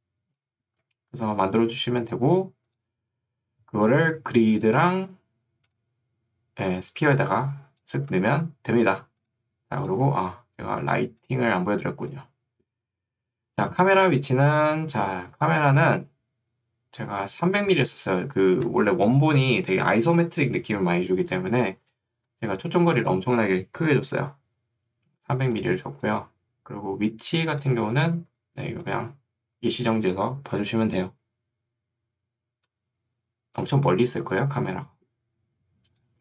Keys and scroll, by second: 1.0 Escape, 8.0 Escape, 17.4 ctrl+2, 18.6 Escape, 22.0 ctrl+2, 24.2 Escape, 25.4 ctrl+2, 26.2 Escape, 28.6 ctrl+2.